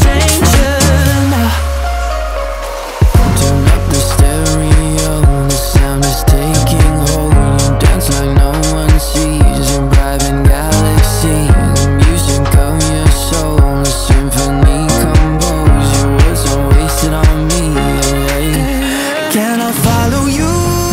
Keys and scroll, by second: 14.4 ctrl+a, 15.0 1, 15.2 5, 15.4 0, 16.7 Return.